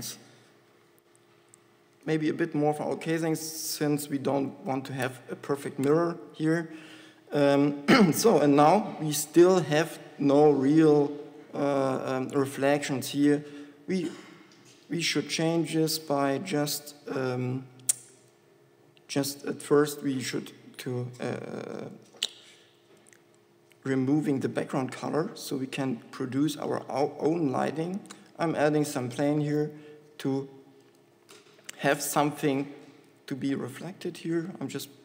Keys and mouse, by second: 8.7 KP_7, 28.6 shift+a, 29.2 g, 33.3 g.